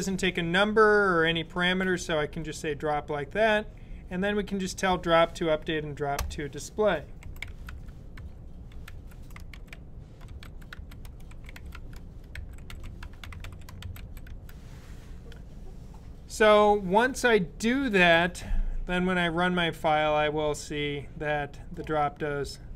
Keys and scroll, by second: 6.8-14.5 typing, 17.8 super+b.